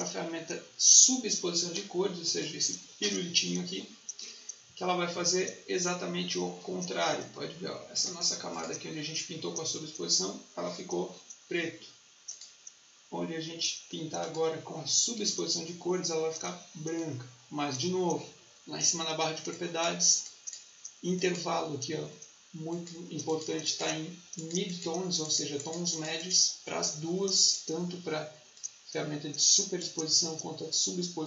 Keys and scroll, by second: 15.1 Escape.